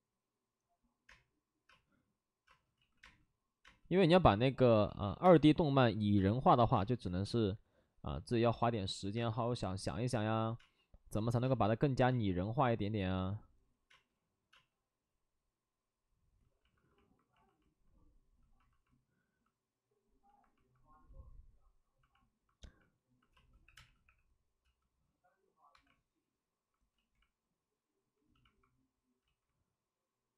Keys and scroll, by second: 1.0 space, 1.6 space, 2.4 space, 2.7 ctrl+z, 3.0 space, 4.6 ctrl+z, 5.2 ctrl+z, 5.2 space, 8.1 space, 10.9 space, 11.4 space, 12.0 ctrl+z, 13.9 space, 16.7 alt+s, 23.3 space, 23.6 3, 23.7 space, 24.0 3, 25.7 1, 26.9 ctrl+z, 29.8 ctrl+z.